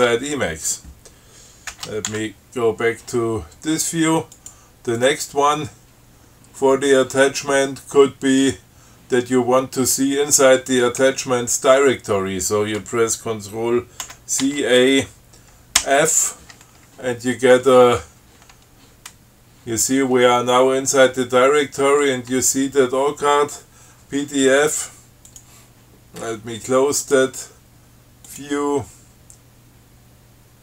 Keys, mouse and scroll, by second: 2.0 ctrl+x, 2.3 ctrl+1, 4.6 click, 5.2 click, 14.3 ctrl+c, 14.7 ctrl+a, 16.1 f, 25.6 click, 27.3 click, 28.5 click.